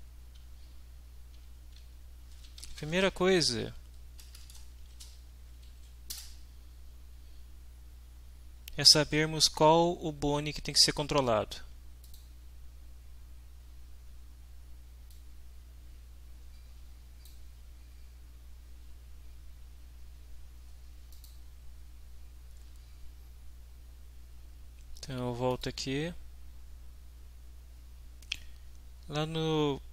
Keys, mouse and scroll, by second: 2.1-4.8 typing, 5.7 Down, 6.2 Return, 12.0 click, 15.1-17.4 drag, 21.2 click, 25.5 click, 28.4 click.